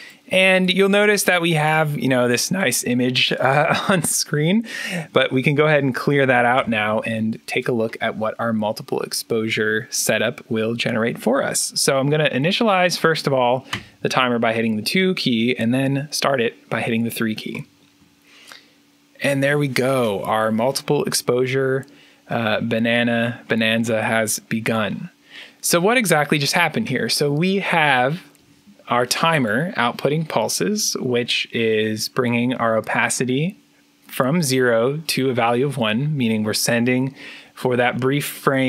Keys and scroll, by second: 6.4 1, 13.6 2, 17.4 3.